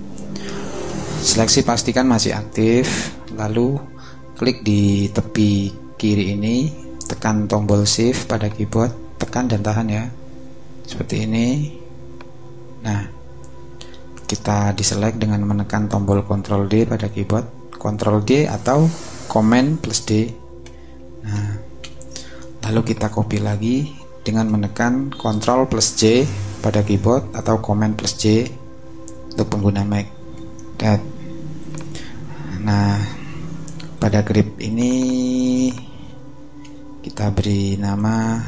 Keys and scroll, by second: 20.6 super+d, 21.7 super+v, 30.3 super+j, 36.6-38.3 typing.